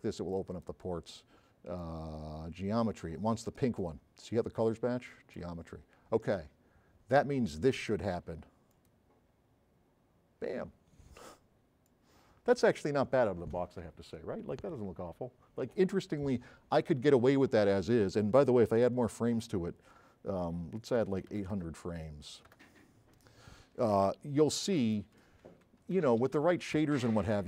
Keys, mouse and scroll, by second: 11.9 click, 21.1 KP_8, 21.5 KP_0, 22.6 KP_Enter, 24.1 s, 24.5-24.9 right drag, 25.5 space, 25.9 s, 26.3 Escape, 27.3 s.